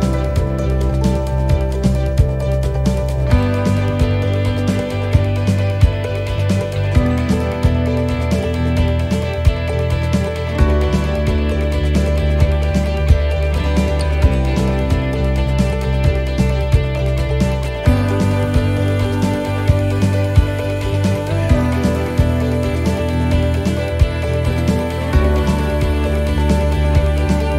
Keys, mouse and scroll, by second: 2.2 middle click, 3.5 click, 3.9 click, 5.6 right click, 6.5 click, 9.2 click, 9.8 middle click, 11.6 right click, 12.9 shift+right click, 13.5 right click, 14.2 shift+right click, 17.3 click, 21.0 click, 23.8 click, 25.0 click.